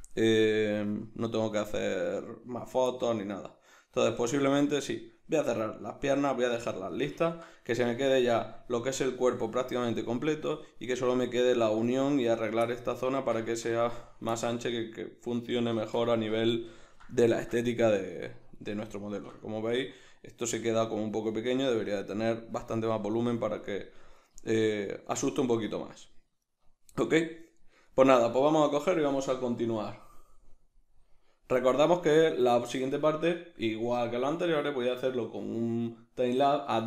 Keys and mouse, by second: 12.3-12.7 right drag, 12.7-14.0 middle drag, 13.5 Tab, 14.0 right click, 14.3-36.8 middle drag.